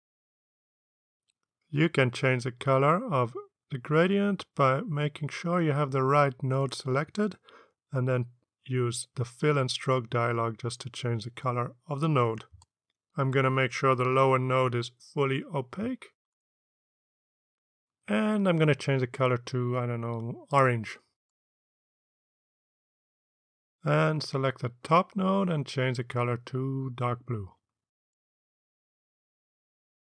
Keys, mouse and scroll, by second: 12.6 click, 14.2 click, 16.9-18.8 drag, 20.9 click, 24.1 click, 28.0 click, 28.5 click.